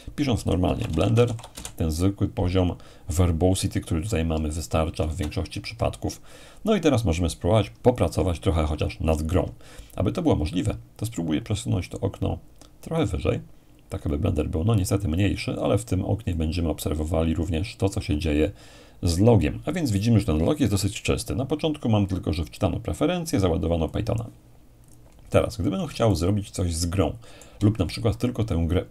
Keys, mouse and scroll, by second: 0.1-2.0 typing, 5.0 alt+space, 13.0-15.8 drag, 16.3-18.9 drag, 22.1-24.8 drag, 25.0 click, 26.1-28.4 shift+middle drag.